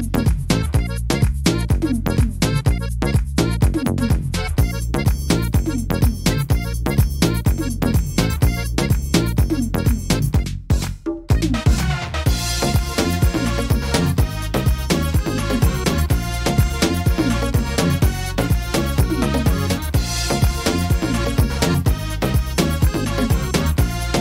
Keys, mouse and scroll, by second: 0.3 middle click, 1.0 right click, 1.7 shift+right click, 2.3 click, 3.5 scroll up 1, 3.6 middle click, 3.9-4.5 scroll down 5, 4.5 shift+middle click, 5.0-5.7 scroll up 3, 5.3 middle click, 5.9 shift+middle click, 6.4 middle click, 8.5 middle click, 8.5 shift+middle click, 8.7 scroll down 3, 9.2 middle click, 10.1 shift+middle click, 10.3 shift+middle click, 10.6 scroll up 1, 10.9 middle click, 11.2 scroll down 2, 12.2 click, 13.2-13.9 scroll up 2, 16.0 click.